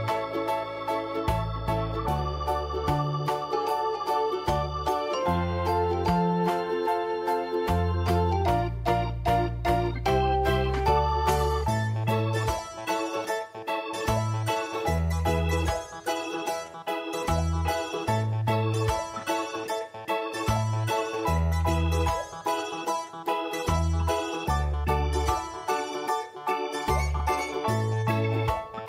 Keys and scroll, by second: 0.3 ctrl+d, 3.3 v, 6.2 ctrl+j, 10.8 d, 12.8 ctrl+BackSpace, 14.1 v, 17.9 ctrl+[, 18.9 v, 23.8 5, 25.0 5.